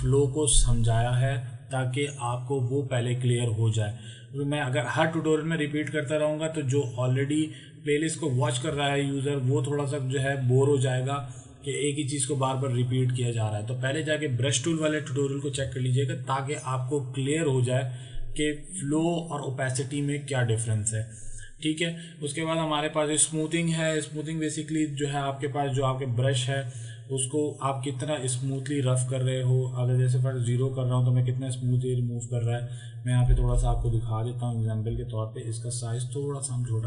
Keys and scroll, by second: 33.7 ctrl+z.